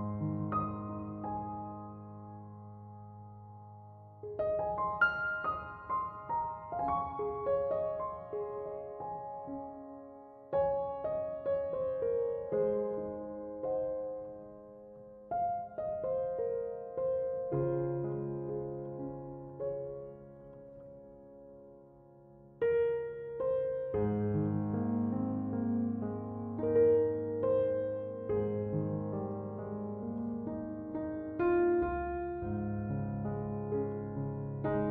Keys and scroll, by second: 11.1-12.1 typing.